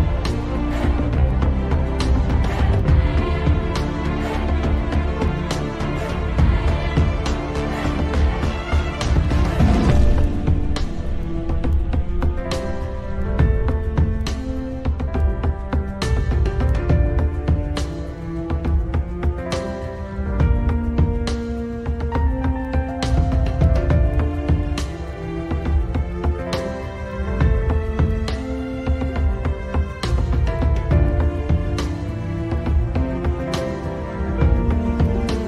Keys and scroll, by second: 19.0 F3, 34.7 F3.